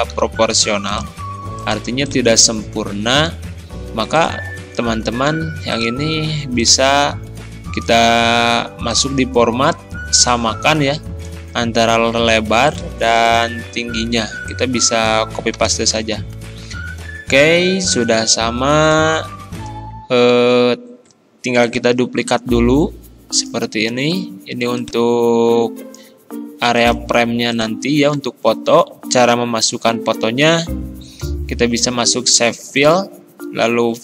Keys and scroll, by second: 0.2 ctrl+z, 5.3 ctrl+z, 11.8 ctrl+c, 15.6 ctrl+v, 16.0 Return.